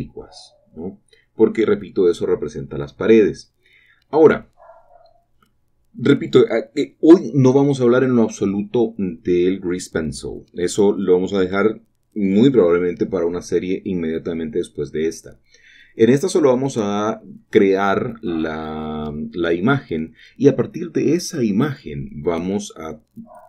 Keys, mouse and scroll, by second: 0.7 shift+middle click, 1.7-3.3 shift+middle drag, 3.3-6.4 drag, 6.4 typing, 10.2-11.5 drag, 10.2 typing, 11.5 typing, 19.3-20.4 shift+drag, 19.3 typing.